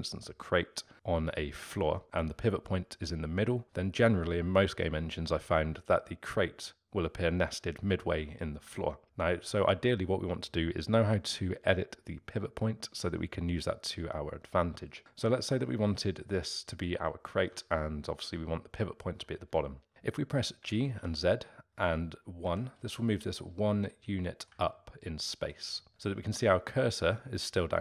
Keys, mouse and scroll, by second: 16.0-19.9 middle drag, 20.6 g, 23.9-27.5 middle drag.